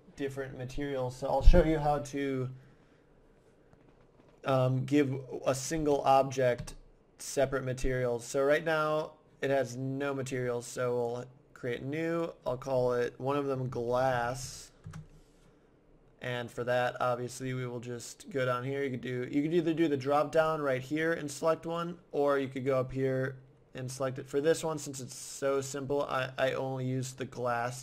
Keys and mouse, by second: 5.8 Tab, 6.6 Tab, 11.0-13.8 drag, 16.5-18.3 drag, 20.4-22.2 drag, 22.6-24.3 drag, 25.5-27.3 drag.